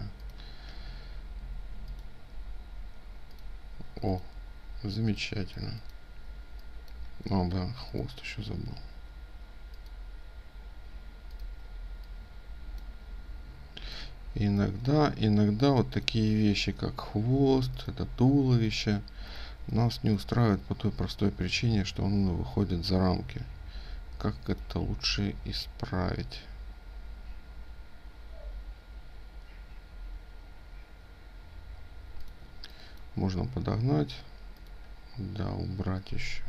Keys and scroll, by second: 3.6 ctrl+alt+space, 11.1 ctrl+space, 31.9 ctrl+space.